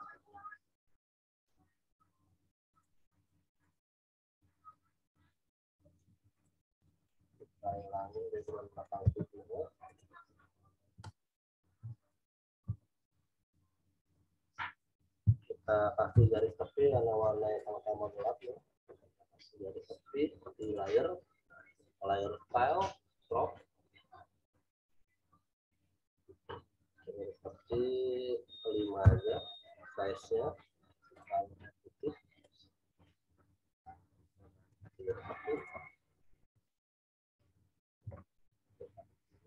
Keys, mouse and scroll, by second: 0.3 click, 6.0 z, 6.3 click, 7.3-8.5 scroll down 1, 8.5 click, 9.0 w, 9.8 click, 11.8 m, 12.1 click, 12.6 w, 14.1 click, 16.1 m, 16.3 click, 17.5-29.0 drag, 29.0 5, 31.1 click, 38.4 ctrl+t, 39.3 alt+shift+click.